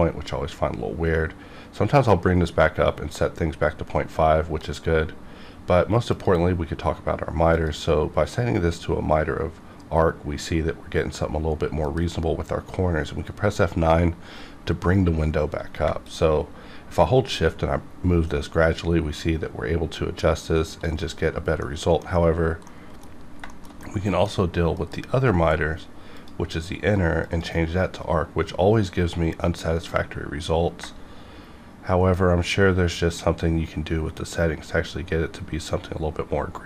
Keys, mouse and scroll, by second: 11.8 F9, 15.8 shift+Num_Lock, 16.0 F9, 16.0-21.6 shift+drag, 21.6 middle click, 22.1 scroll up 1, 22.7 middle click, 23.2 scroll down 1, 23.5 shift+middle click, 24.8 F9, 26.2 click, 30.2-36.6 drag.